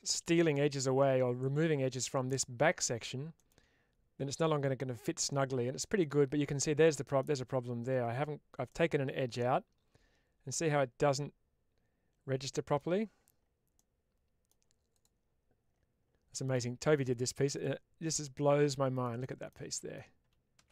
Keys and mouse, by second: 3.2 middle click, 4.3-5.1 middle drag, 5.7 middle click, 6.7-7.1 middle drag, 8.5-12.6 middle drag, 13.6-14.3 middle drag, 14.8 click, 16.2 middle click, 18.5-18.9 middle drag, 19.5 middle click.